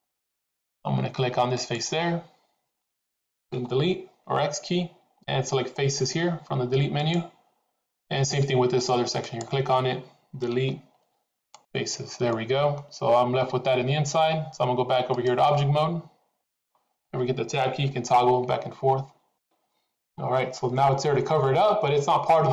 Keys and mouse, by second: 1.5 click, 3.5 Delete, 9.1 click, 10.5 Delete, 12.3 middle click, 15.0-16.8 drag, 17.9 Tab, 18.5 Tab, 18.9 Tab, 19.7 Tab, 20.6-22.1 middle drag.